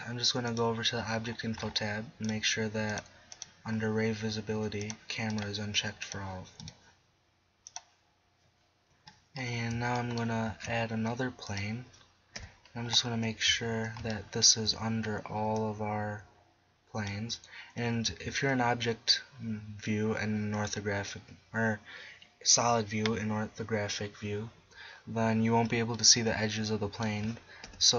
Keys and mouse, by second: 8.9-9.6 middle drag, 10.5 shift+a, 12.4 KP_1, 13.5 z, 18.1 z, 27.7 KP_1.